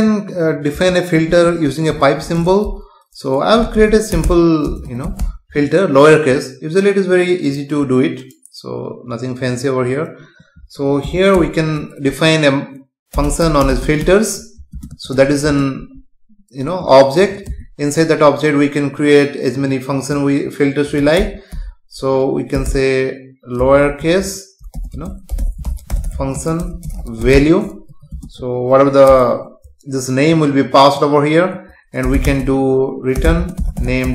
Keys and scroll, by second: 0.7 space, 11.4 Return, 14.7 space, 17.5 Return, 24.9 space, 27.9 Right, 28.1 space, 29.1 Return, 33.4 space.